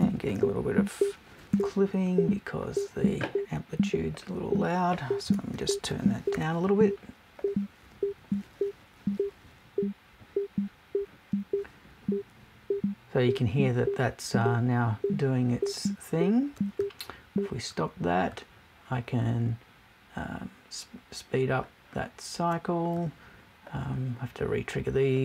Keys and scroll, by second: 5.2 BackSpace.